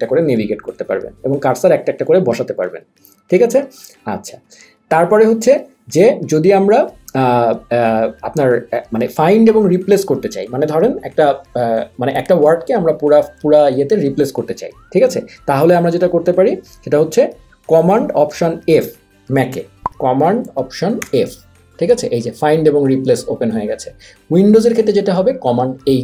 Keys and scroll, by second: 21.2 alt+super+f.